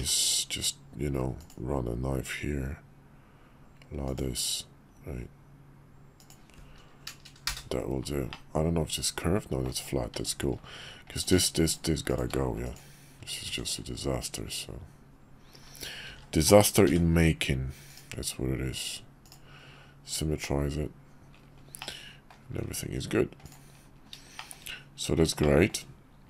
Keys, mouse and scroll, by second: 8.3-9.6 middle drag, 10.2 Tab, 11.1 click, 11.7 shift+click, 12.4 x, 13.5 Tab, 16.1 alt+x, 20.9 click, 21.8 middle click, 24.4 shift+middle click, 25.4 shift+middle drag.